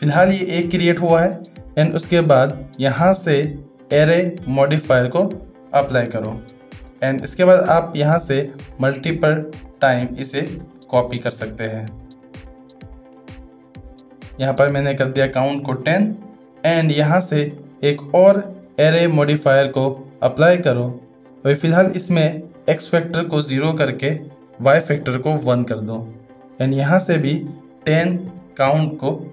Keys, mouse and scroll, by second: 1.9-4.8 drag, 6.3 shift+middle drag, 7.0 middle click, 8.7 click, 8.9 click, 9.3 click, 9.6 click, 10.7-11.1 shift+middle drag, 12.8 click, 13.0 click, 13.1 click, 14.1 drag, 16.1 shift+middle click, 17.6 drag, 18.1-20.2 drag, 22.8-26.5 drag, 27.3-29.3 drag.